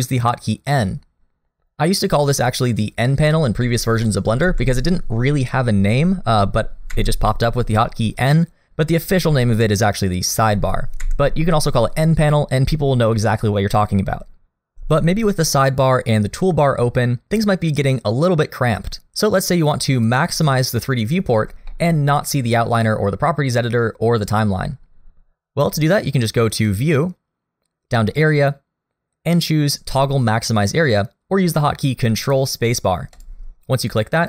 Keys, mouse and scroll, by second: 1.5 n, 4.4 n, 6.9 n, 10.4 n, 11.0 n, 20.8 middle click, 21.4 scroll up 1, 21.7 shift+middle click, 26.5 click.